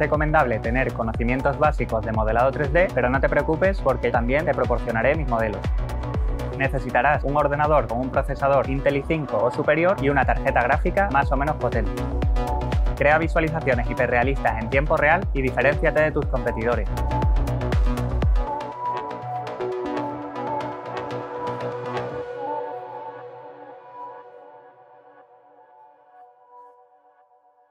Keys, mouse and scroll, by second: 0.7 Num_Lock, 0.7 click, 1.8 middle click, 2.5 scroll down 1.